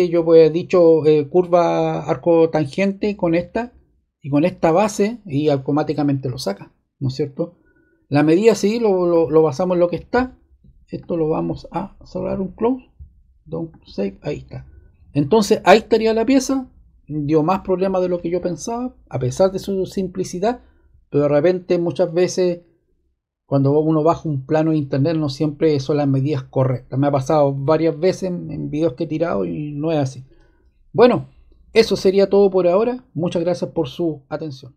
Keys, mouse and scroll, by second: 10.1 click, 10.9-13.5 drag.